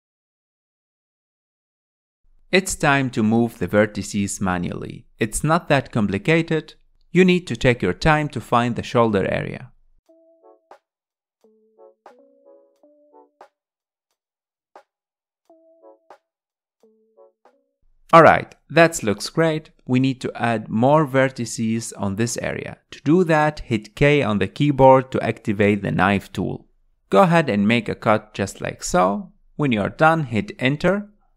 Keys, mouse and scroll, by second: 2.4-6.5 typing, 2.9 click, 3.3 click, 4.2 click, 4.7 click, 5.5 click, 5.8 click, 6.8 alt+z, 6.8 middle click, 6.9 alt+z, 7.0 middle click, 7.2 scroll down 2, 7.3 middle click, 7.7 scroll up 2, 8.4 click, 9.6 click, 9.9 click, 10.5 click, 11.5 click, 12.3 click, 12.4 scroll down 3, 12.7 alt+z, 12.8 middle click, 13.3 click, 13.7 middle click, 14.5 scroll down 2, 14.6 middle click, 15.5 KP_1, 15.8 scroll up 2, 16.1 shift+middle click, 16.3 scroll down 3, 16.5 middle click, 17.3 KP_1, 17.6-18.2 scroll up 5, 18.8 scroll up 2, 19.8-22.2 shift+middle drag, 22.2 k.